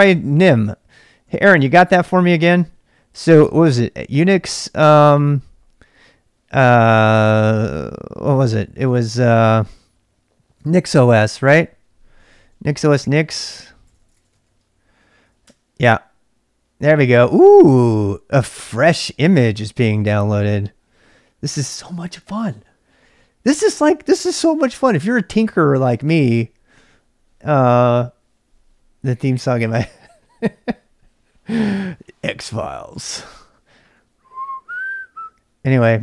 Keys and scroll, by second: 0.0-5.7 typing, 7.2-7.7 typing, 10.2-16.5 typing, 15.4 Return.